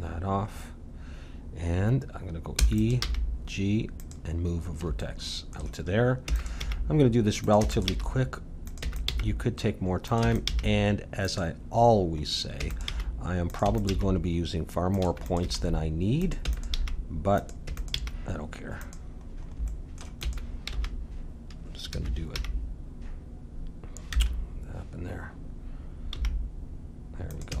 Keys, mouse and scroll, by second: 2.6 e, 3.0 g, 4.5-6.9 middle drag, 6.2-9.1 typing, 10.2 e, 10.5 g, 12.2 middle click, 12.5 e, 12.9 g, 13.6 e, 13.9 g, 15.0-18.0 typing, 19.3 middle click, 20.2-21.7 drag, 20.2 e, 22.3 g, 26.1 g, 27.5 e.